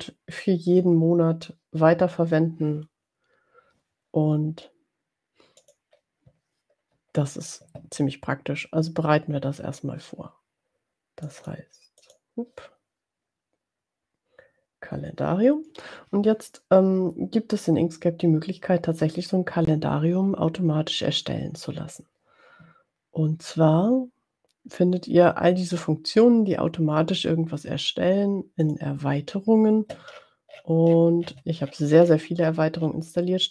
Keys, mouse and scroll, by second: 5.7 click, 11.3 click, 12.0 click, 28.7 click, 30.4-30.8 scroll down 4, 31.4-31.9 scroll down 4, 32.4-33.5 scroll down 2.